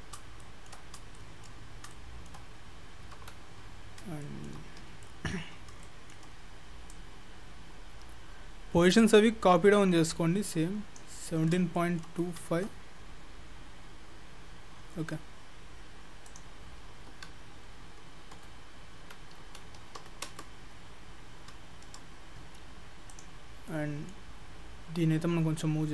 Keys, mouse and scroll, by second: 0.4 shift+middle click, 1.1 shift+scroll up 1, 1.2 shift+middle click, 2.4 shift+middle click, 3.2 KP_7, 4.0 scroll up 3, 4.3 shift+middle click, 4.7-5.0 scroll up 2, 5.1 shift+middle click, 5.6 scroll up 2, 5.9 shift+middle click, 7.0 click, 11.4-11.8 scroll up 5, 11.8 shift+middle click, 12.2-13.9 scroll up 5, 13.9-14.5 scroll up 7, 14.7-16.3 scroll down 26, 16.3 click, 21.4-21.9 scroll up 6, 22.1-23.1 scroll down 9, 23.1 click, 23.1 scroll down 3, 23.7 middle click.